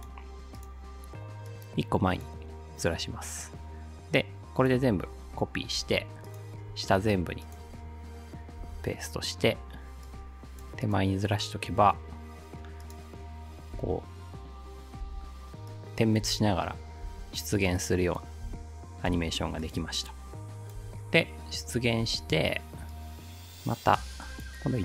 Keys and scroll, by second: 5.8 ctrl+c, 8.6 ctrl+v, 13.8 space, 15.0 space, 16.3 space, 20.8 space, 22.0 space.